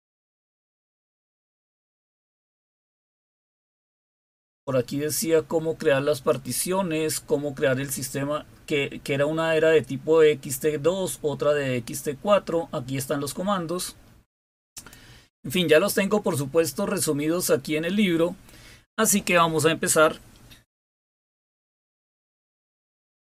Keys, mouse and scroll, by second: 0.2-0.6 scroll down 3, 1.4-1.9 scroll down 3, 2.1-3.0 scroll down 3, 4.3-5.3 scroll down 2, 6.2 click, 9.9 scroll down 1, 10.9-12.1 scroll down 3, 14.6 click.